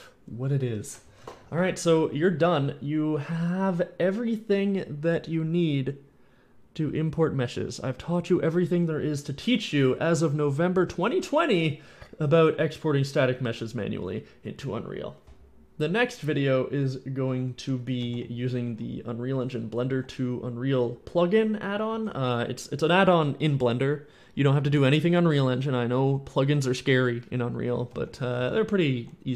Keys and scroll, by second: 15.2 alt+p, 17.2-20.2 typing, 21.7 a, 22.0 w, 27.5-29.3 typing.